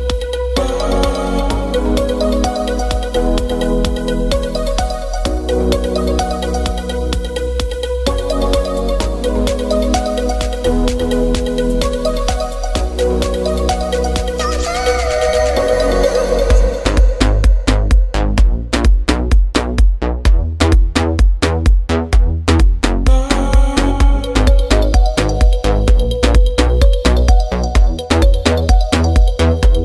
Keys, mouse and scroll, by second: 1.8 shift+z, 3.8 shift+z, 8.9-12.8 drag, 13.2 click, 13.4 alt+shift+z, 14.2-17.9 middle drag, 18.2-24.0 drag, 24.0-26.6 middle drag.